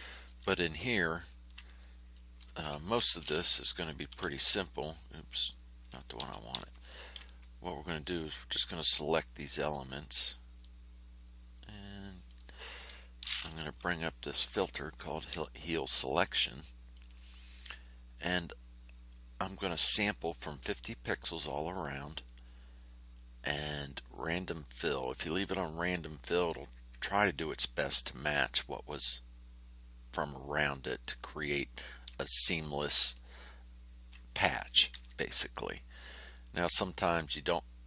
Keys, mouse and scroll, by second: 1.0-1.4 ctrl+scroll up 2, 1.7 ctrl+middle click, 4.0 h, 5.3 click, 6.1 r, 6.8 ctrl+scroll up 2, 8.0-9.9 drag, 10.6-12.4 drag, 14.4 shift+0, 16.2 click.